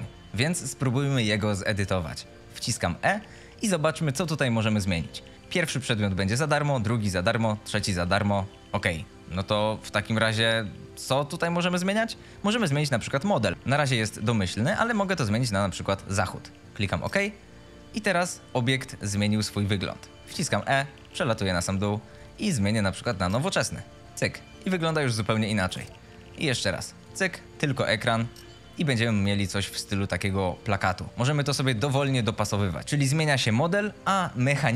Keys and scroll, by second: 2.0 w, 2.4 e, 18.0 a, 18.8 d, 20.1 e, 23.7-25.5 typing, 28.8 d, 30.2-32.8 typing.